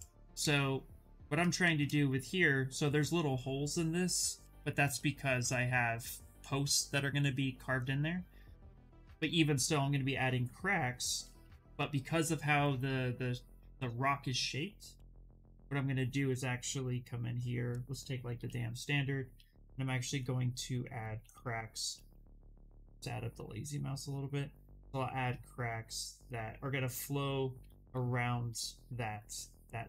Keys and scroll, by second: 11.1 s, 14.6 b, 18.9 s, 20.7 ctrl+z, 21.1 s, 23.0 s.